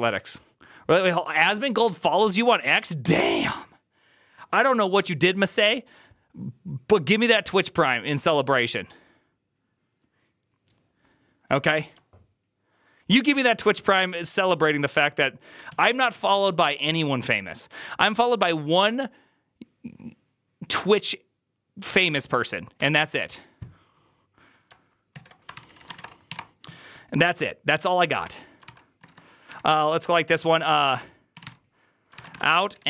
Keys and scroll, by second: 16.2 alt+{, 25.4 alt+{, 25.4 ctrl+c, 25.5-26.7 typing, 28.1 Tab, 28.5 ctrl+c, 28.7-29.4 typing, 31.0-32.8 typing.